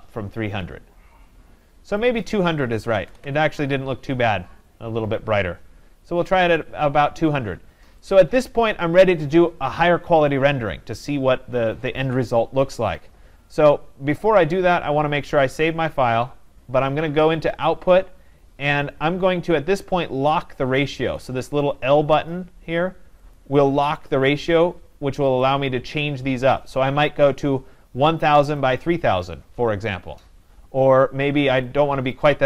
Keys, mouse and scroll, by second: 2.3 click, 2.6-3.6 typing, 8.5-13.3 drag, 17.7-22.7 drag, 23.4 click, 25.4 click, 27.2 0, 28.6 click, 32.1 click.